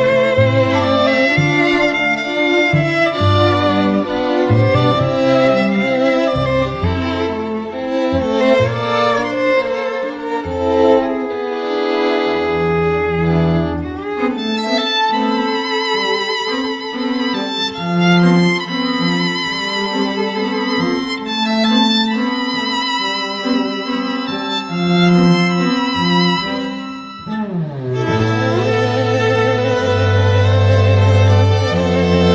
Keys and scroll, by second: 5.3 ], 7.5 [, 18.2 ].